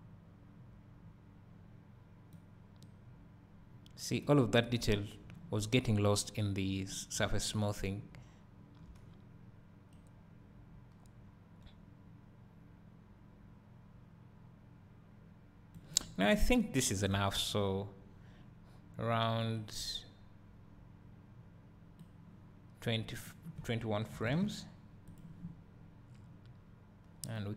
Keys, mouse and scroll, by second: 5.0-5.7 scroll down 1, 7.3 `, 16.2 scroll down 1, 17.4 Escape, 27.4 click.